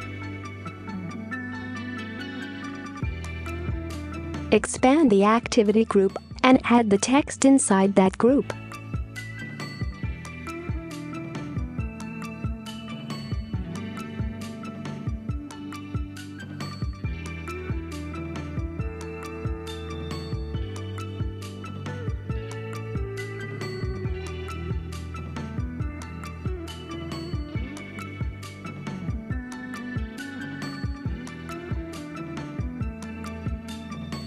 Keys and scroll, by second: 0.8 space, 14.7 space, 21.9 ctrl+z, 30.4 space, 31.8 space, 32.4 space, 32.4 space, 33.7-34.2 space.